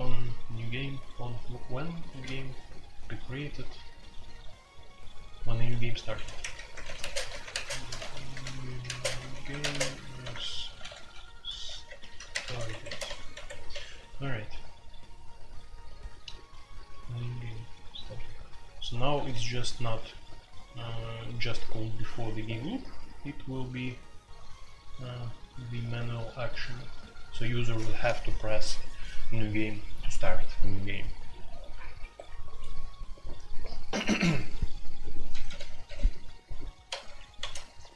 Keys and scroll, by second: 2.2 Escape, 6.1-13.7 typing, 35.3 d, 35.4 d, 35.8 d, 36.0 d, 37.4 k.